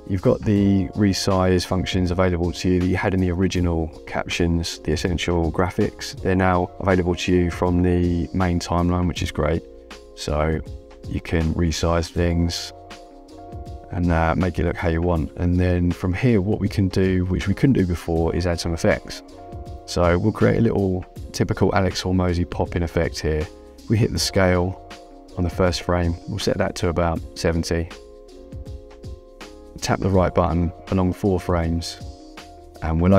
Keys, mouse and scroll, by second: 0.0 click, 4.1 click, 7.6 click, 10.7 click, 15.9 click, 18.0 click, 23.8 click, 26.0 click, 27.9 KP_7, 28.1 KP_0, 28.6 Return, 28.6 KP_Enter, 33.0 Right.